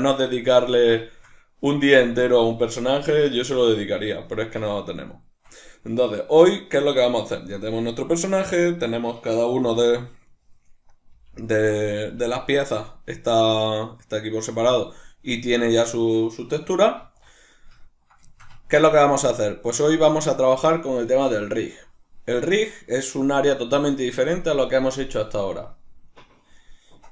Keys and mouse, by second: 8.6 right click, 9.6 g, 10.4 right click, 10.9 right click, 11.1 g, 11.9 right click, 12.1 g, 12.8 right click, 17.8-27.1 ctrl+middle drag.